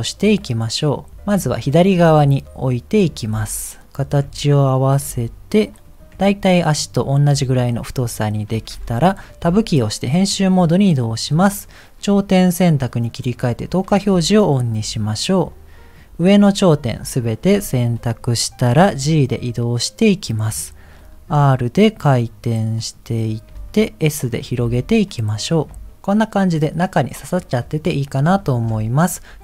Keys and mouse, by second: 1.1 shift+middle click, 2.0 g, 3.3 s, 4.2 g, 5.1 s, 6.1 g, 8.2 shift+middle click, 9.4 Tab, 11.2 click, 13.1 click, 15.2 click, 16.5 middle click, 17.5 KP_1, 19.1 g, 21.0 r, 23.5 g, 24.6 s, 25.7 g, 26.0-28.0 middle drag.